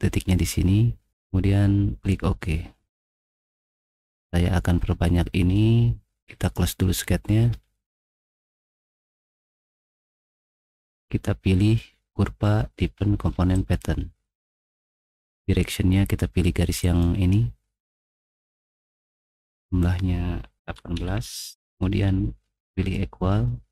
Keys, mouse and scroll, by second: 2.0 click, 3.1 middle click, 3.3 middle click, 3.5 middle click, 3.7 click, 6.4 click, 10.8 click, 11.9 middle click, 13.6 click, 16.8 click, 19.1 click, 20.7-21.0 typing, 21.6-22.2 Return.